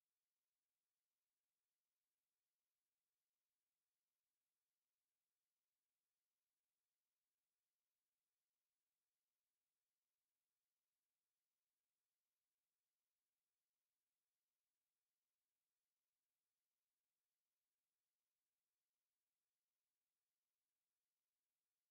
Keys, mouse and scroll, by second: 1.5 click, 3.1 click, 3.7 right click, 5.0 click, 6.3 click, 8.8 KP_1, 9.7 KP_Enter, 10.7 click, 12.1 click, 14.3 KP_2, 14.5 KP_0, 15.0 KP_Enter, 16.9 click, 18.1 click, 19.3 KP_5, 19.6 KP_Enter, 21.5 click.